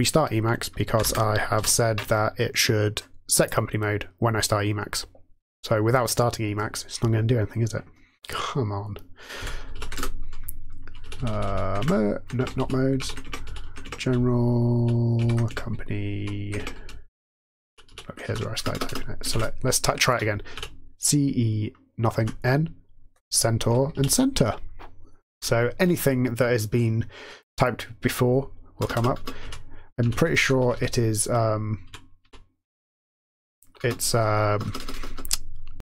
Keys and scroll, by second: 0.0-1.5 typing, 1.5 super+f, 9.4 m, 9.7 Down, 9.9 Return, 11.4 Down, 11.7 Tab, 12.3 Tab, 12.5 Down, 12.9 Up, 13.2 Tab, 13.4 Down, 13.7 Tab, 14.0 Down, 14.5 Down, 14.6-15.1 Down, 15.1 Up, 15.4 Tab, 16.1 Up, 16.1 typing, 16.8-17.5 Down, 18.2 ctrl+e, 18.5-19.2 typing, 20.5 typing, 22.1 typing, 23.9 Down, 28.7-32.1 typing, 33.7-35.0 typing.